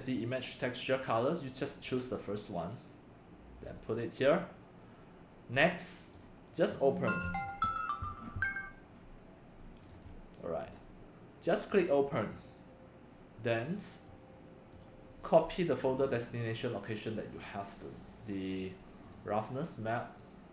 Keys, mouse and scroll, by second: 1.6 click, 2.6 click, 4.0-4.5 drag, 6.1-6.9 drag, 7.0 click, 9.8 drag, 10.7 click, 12.2 click, 14.4 click, 15.0 click, 16.0 click, 18.0 click, 19.0 drag, 19.6 drag.